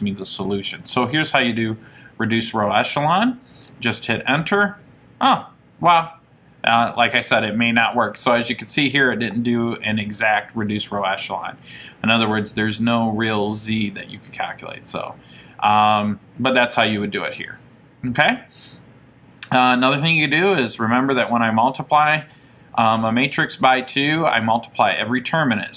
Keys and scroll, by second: 3.8 Return, 20.6 2.